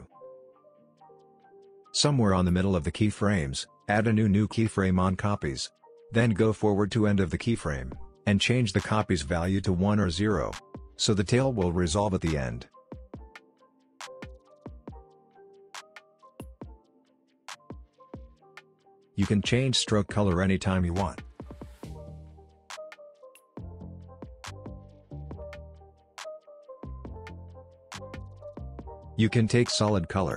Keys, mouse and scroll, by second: 0.7-1.3 click, 1.3 space, 3.3 drag, 5.9-6.8 shift+drag, 9.1 Return, 10.4-11.6 drag, 16.2 Return, 16.9 click, 23.3-23.7 click, 26.4 click.